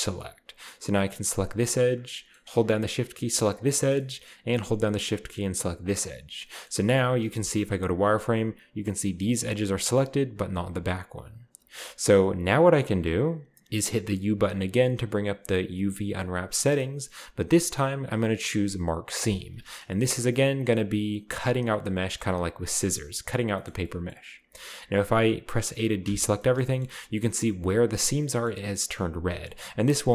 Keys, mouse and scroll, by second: 1.3-1.7 right drag, 1.6-2.6 scroll down 1, 3.6 shift+right click, 3.9 shift+middle drag, 4.2-5.8 scroll up 3, 5.8 shift+right click, 6.2-7.4 shift+middle drag, 6.3-6.6 scroll down 1, 6.6-7.4 scroll up 2, 7.4 z, 7.7-8.1 scroll up 1, 11.5 z, 12.8 z, 14.7 u, 19.2-19.9 drag, 19.9-20.9 scroll up 2, 20.0 shift+middle click, 23.5-26.0 middle drag, 26.0 a, 26.9-27.9 shift+middle drag, 26.9-27.9 shift+scroll up 2, 28.6-30.0 middle drag, 28.6-29.2 scroll up 2, 29.2 shift+scroll up 1.